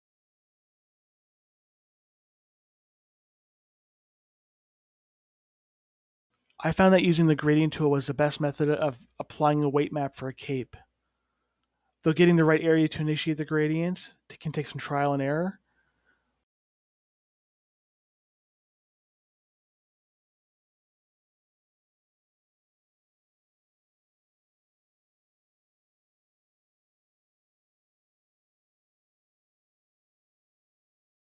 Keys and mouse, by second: 1.2-2.2 drag, 5.8-16.6 drag, 18.0-20.3 middle drag, 21.0-23.2 middle drag, 24.0 middle click, 25.4-26.9 middle drag, 26.9 KP_Divide, 27.4 middle click, 27.7 middle click, 29.0 KP_3, 29.1-30.6 middle drag, 30.6 click.